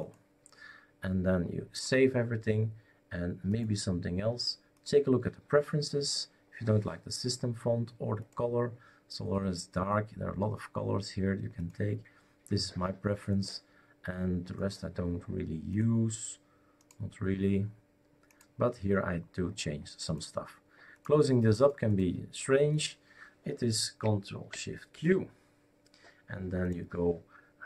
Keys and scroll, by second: 24.9 shift+super+q.